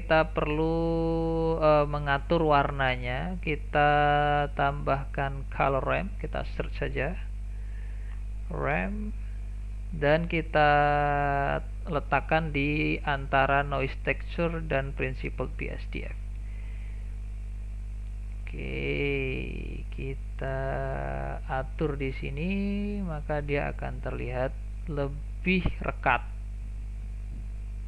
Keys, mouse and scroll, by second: 14.3-15.6 drag, 15.6 scroll down 1, 15.9 shift+middle click, 16.3 scroll up 2, 16.5-18.0 shift+middle drag, 18.0-22.1 drag, 22.1-22.5 scroll up 2, 22.5-23.4 middle drag, 23.4-23.8 scroll up 3, 23.8-24.2 middle drag, 24.2-24.6 scroll down 1, 24.6-24.9 shift+middle drag, 24.9-25.3 scroll down 1, 25.3-26.2 middle drag, 26.2-27.8 drag.